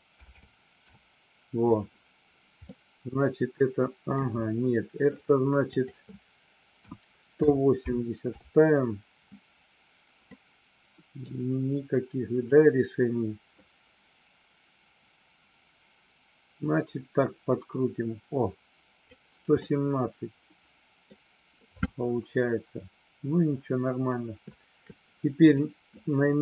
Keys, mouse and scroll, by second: 2.8-4.1 middle drag, 5.6-9.4 drag, 10.2-11.2 middle drag, 12.5-19.1 drag, 19.6-21.1 middle drag.